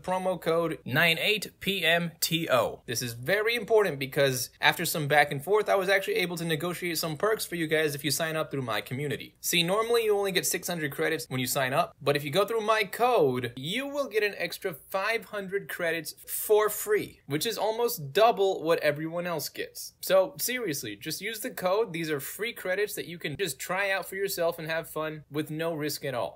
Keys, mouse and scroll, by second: 0.4 click, 0.9 ctrl+v, 9.3-11.7 middle drag, 13.5 click, 14.5 click, 14.9 click, 15.7-16.8 middle drag, 17.2 End, 17.9-22.4 middle drag, 17.9-19.4 scroll up 2, 19.4-20.7 scroll up 1, 20.7-22.0 scroll up 1, 22.0 scroll up 1, 22.2 scroll down 2, 23.2-25.9 middle drag, 23.2 scroll down 2, 23.4-24.4 scroll up 2, 24.4-25.5 scroll up 1, 25.5-25.9 scroll up 1.